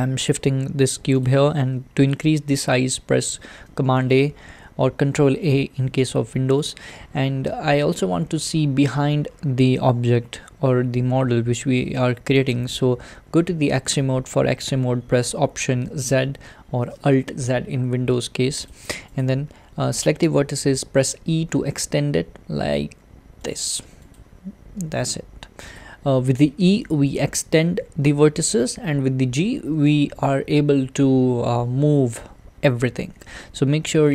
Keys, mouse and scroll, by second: 3.8 a, 15.3 alt+z, 18.7 click, 19.2 click, 21.1 e, 24.2 click, 24.9 g, 30.0 g.